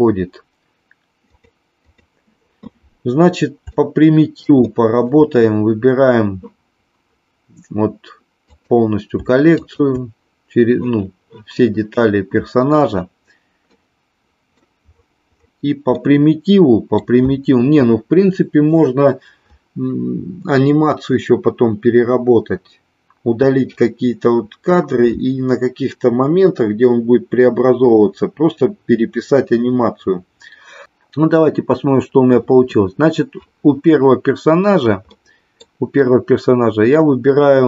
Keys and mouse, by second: 1.2 click, 1.9 click, 3.7-4.4 shift+middle drag, 4.7 middle click, 8.4 click, 9.7 shift+click, 13.8 middle click, 16.0 middle click, 35.2 middle click.